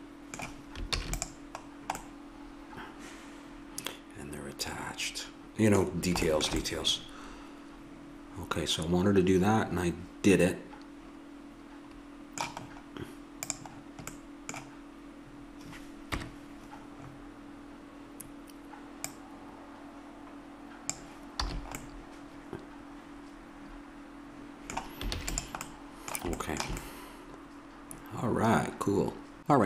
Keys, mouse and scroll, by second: 1.0 ctrl+s, 6.7-8.6 middle drag, 13.5-15.1 drag, 16.1 KP_1, 19.1-21.0 drag, 21.5 a, 21.8-23.0 middle drag, 25.1 ctrl+s.